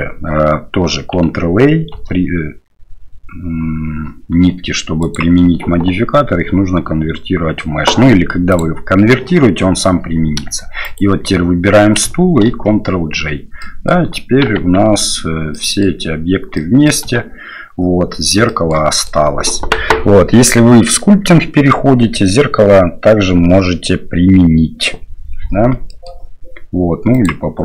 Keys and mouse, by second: 1.9 ctrl+a, 5.1-8.8 drag, 10.8 shift+click, 12.7 ctrl+j, 13.6-13.9 drag, 15.1 Tab, 15.5 click, 16.5 click, 17.3 Tab, 18.4 shift+middle click, 18.9 middle click, 25.9 middle drag.